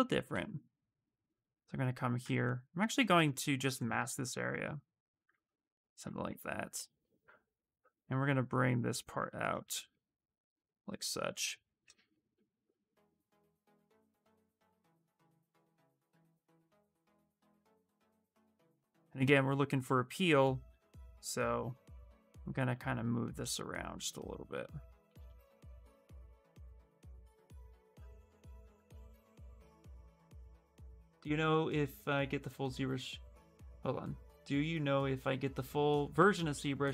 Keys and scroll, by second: 2.0 ctrl+z, 15.4 s, 15.7 w, 27.6 ctrl+z, 28.4 q.